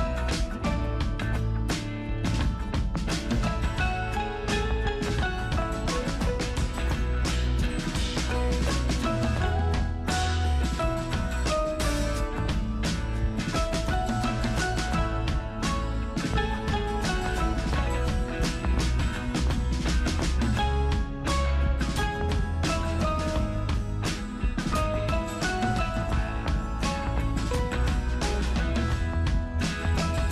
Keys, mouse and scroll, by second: 4.3 super+click, 8.6 super+right click, 10.0 super+click, 13.4 super+click, 13.8 super+right click, 14.6 super+click, 17.3 super+click, 19.3 super+click.